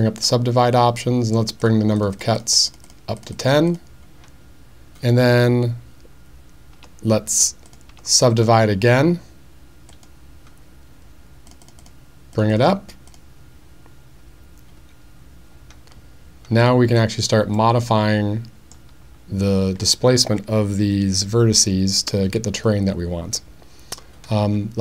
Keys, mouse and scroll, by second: 0.1 click, 1.6 click, 2.0 click, 2.2 click, 2.4 click, 2.7 click, 2.9 click, 3.2 click, 3.4 click, 3.5 click, 3.7 click, 6.8 Tab, 7.9 Tab, 8.3 right click, 11.5 click, 11.7 click, 11.8 click, 12.3 click, 12.5 click, 13.1 click, 17.5-18.7 middle drag.